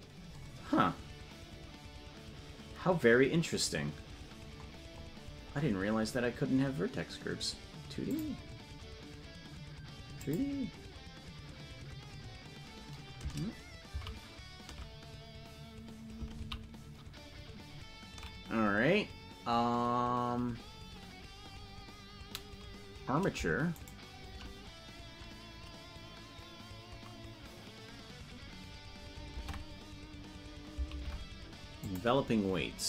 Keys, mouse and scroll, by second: 0.4 scroll down 6, 4.5 scroll up 2, 8.1 click, 8.1 scroll up 23, 10.1 click, 14.8 ctrl+z.